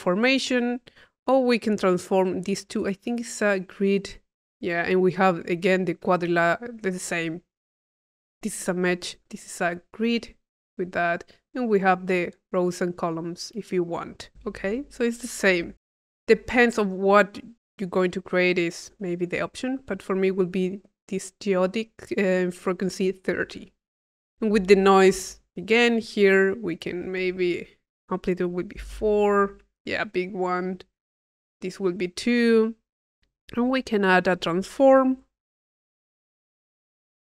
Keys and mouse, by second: 1.3 click, 2.8 click, 3.3-4.4 drag, 6.8 click, 9.1 click, 11.5 click, 12.6-14.3 drag, 14.7 click, 15.5 Delete, 15.9-17.3 drag, 18.4-20.2 drag, 23.9 click, 25.4 click, 26.7 click, 27.8 click, 28.6 click, 30.9 click, 32.4-33.6 drag, 33.9 click, 34.5 click, 36.1 click, 36.8 click.